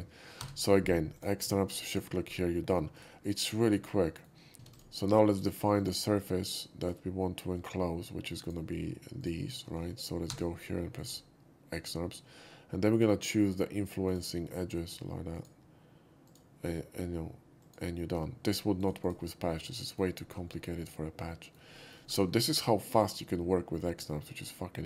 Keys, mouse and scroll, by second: 0.4 f, 1.1 click, 1.9 shift+click, 2.9 shift+right click, 3.2 shift+click, 3.7-4.2 shift+middle drag, 4.5 ctrl+z, 4.7 click, 5.8 click, 6.5 shift+click, 6.8 shift+click, 7.6 shift+click, 8.4 click, 9.2 click, 10.3 f, 11.0 click, 12.9 click, 14.1 click, 15.4 shift+click, 16.3 shift+click, 17.6 shift+click, 18.8 shift+right click, 19.0 shift+click, 19.6-20.0 shift+middle drag, 20.2 shift+middle drag, 20.5-21.5 shift+middle drag, 21.7 shift+middle drag, 22.1 scroll down 1, 22.4-24.7 shift+middle drag.